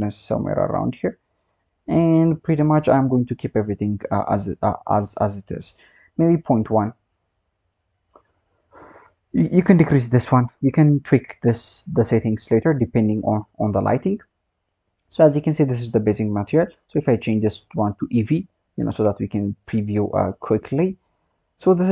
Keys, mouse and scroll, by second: 1.4-5.1 scroll down 5, 5.1-5.9 scroll up 1, 5.9-8.8 drag, 10.6 click, 12.4 click, 18.2 click, 19.0 scroll down 2, 19.7 click, 20.8-21.8 scroll up 5, 21.8-21.9 scroll down 2.